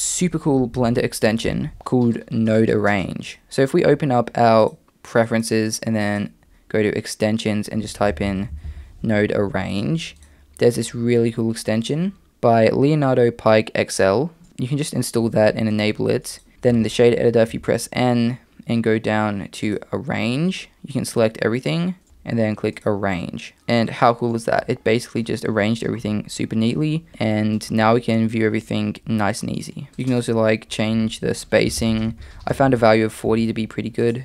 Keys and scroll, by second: 1.5 super+,, 16.5 n, 16.7 n, 17.5 n, 22.0 a, 29.9 a, 33.3 a.